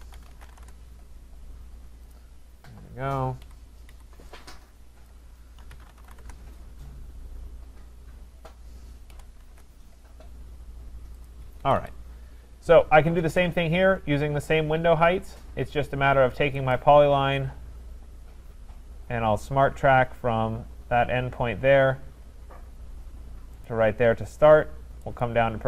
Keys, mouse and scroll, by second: 0.0-1.0 typing, 2.1 click, 3.2-4.0 typing, 5.1 click, 5.5-7.6 typing, 9.1 6, 9.4 shift+', 9.5 Return, 11.3 click, 11.6 Escape, 11.8 Escape, 12.3 middle click, 12.4 middle click, 16.7 click, 23.6 click, 25.2 click.